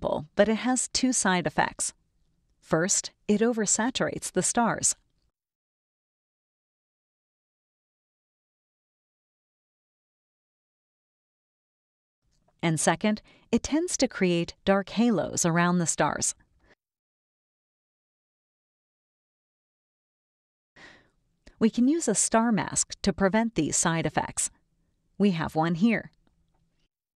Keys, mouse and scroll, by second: 0.4 click, 0.5 scroll down 1, 1.0 space, 1.1-2.2 drag, 4.3 click, 6.1 click, 8.2 click, 9.0 click, 9.9 click, 10.5 click, 13.0-14.7 drag, 15.5-18.5 drag, 19.2-21.6 drag, 25.4 click.